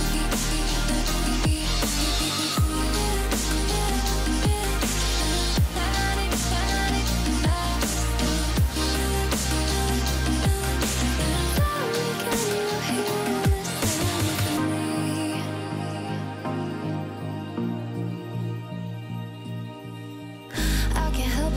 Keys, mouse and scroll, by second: 0.3 click, 2.2-2.5 alt+scroll up 1, 2.7 alt+scroll down 1, 2.7 click, 3.0 alt+scroll up 1, 3.3 click, 4.0 alt+scroll up 1, 4.1 click, 4.6 F7, 5.4 alt+scroll up 1, 6.2 click, 6.5 click, 7.4 shift+8, 8.4 click, 9.0 shift+8, 9.8 click, 11.2-13.8 drag, 14.1-14.4 alt+scroll down 1, 14.5 click, 14.8-15.2 alt+scroll down 1, 15.3 click, 16.7 Delete, 17.2-17.5 alt+scroll down 1, 17.8 alt+scroll up 1, 17.8 click, 18.6 alt+scroll up 1, 18.9-19.3 drag, 21.1 Down.